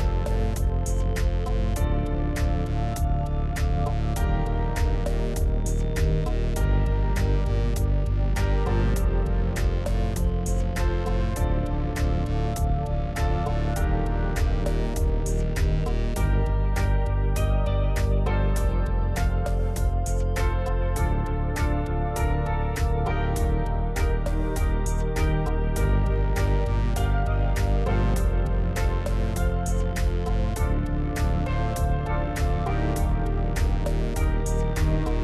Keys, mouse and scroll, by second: 1.4 l, 2.5 p, 4.6 Tab, 5.4 click, 6.3 Tab, 6.8 middle click, 7.7 KP_1, 8.4 alt+click, 8.6-9.1 scroll up 1, 9.1 g, 11.7 click, 12.2 g, 15.4 click, 16.4 ctrl+z, 17.0 ctrl+z, 17.5 shift+click, 17.9 g, 19.9 click, 20.3 ctrl+r, 21.7 click, 22.2 click, 22.7 g, 25.2 click, 25.6 g, 26.8 click, 27.0 g, 27.8 shift+click, 28.2 g, 29.2 click, 29.4 click, 29.5 g, 31.2 click, 32.0-33.4 middle drag, 33.4 KP_7.